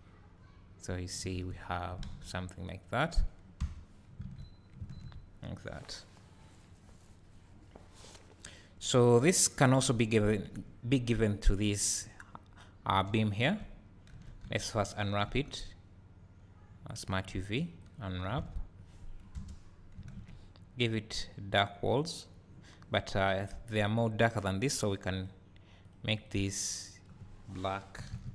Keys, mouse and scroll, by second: 0.4 scroll down 1, 0.9-1.4 scroll up 1, 1.4 alt+a, 2.3 scroll down 1, 3.6 KP_Divide, 4.3 alt+a, 9.6 click, 14.1 Tab, 14.6 a, 17.9 u, 18.5 Tab, 19.4 KP_0, 22.1-25.6 drag.